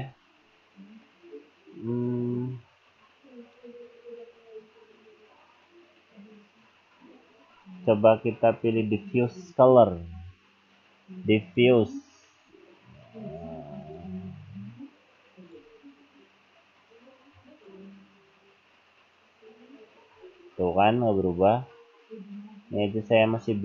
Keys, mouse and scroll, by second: 0.5-1.6 scroll down 4, 3.4 right click, 4.3-5.2 scroll down 4, 7.6 right click, 8.7 click, 12.4-12.8 scroll down 2, 14.0 click, 20.1-21.6 scroll up 5.